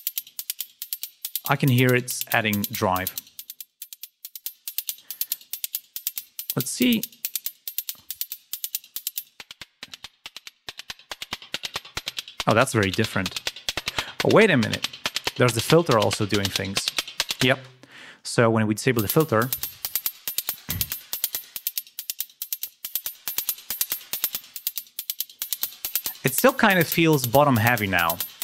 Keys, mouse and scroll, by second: 3.0 click, 4.2 click, 8.3 click, 9.1 right click, 9.8 click, 13.0 click, 14.8 ctrl+scroll down 2, 16.7 click, 17.5 space, 17.8 click, 18.3 ctrl+scroll down 2, 18.9 ctrl+space, 19.1 ctrl+scroll up 2, 19.8 ctrl+scroll down 2, 20.1 ctrl+scroll up 2, 21.3-22.6 drag, 26.3 click.